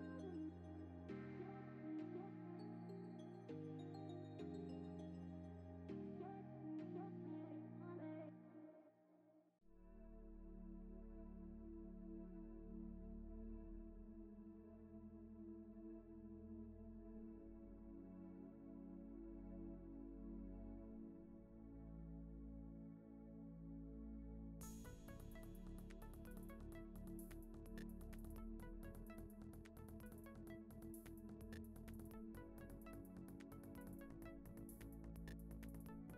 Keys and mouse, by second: 0.0 g, 0.8 s, 1.4 ctrl+z, 1.5 ctrl+z, 2.6 click, 2.9 g, 4.3 g, 6.2 click, 6.3-6.9 middle drag, 7.3 click, 7.6 g, 8.4 g, 9.1 middle drag, 9.3 KP_0, 10.0 shift+drag, 10.2 click, 10.4 shift+drag, 10.6 g, 11.4 click, 11.5 g, 11.9 click, 11.9 g, 13.3 shift+middle click, 14.1 click, 14.3 click, 14.4 click, 14.6 click, 14.9 click, 15.3 drag, 15.6 g, 17.4 z, 18.0 click, 18.6 click, 18.8 click, 18.9 shift+click, 22.7 shift+middle click, 24.2 shift+click, 24.3 shift+click, 26.2 click, 26.4 click, 26.4-27.9 drag, 29.0 click, 29.3 shift+click, 29.8 alt+click, 31.2 click, 31.9 click, 32.1 shift+click, 32.8 shift+middle click, 34.4 ctrl+l, 35.1 click, 35.3 click, 35.5 click.